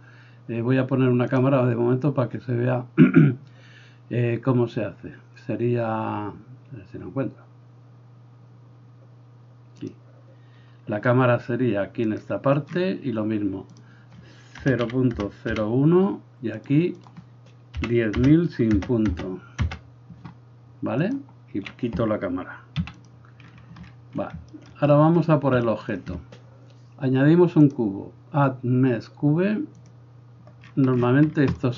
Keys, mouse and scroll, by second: 1.4-12.3 drag, 12.3-13.7 middle drag, 13.7-16.6 drag, 16.6 middle click, 17.0-21.1 drag, 19.2 KP_0, 21.1-27.7 middle drag, 22.8 x, 27.7-31.6 drag, 31.6-31.7 middle drag.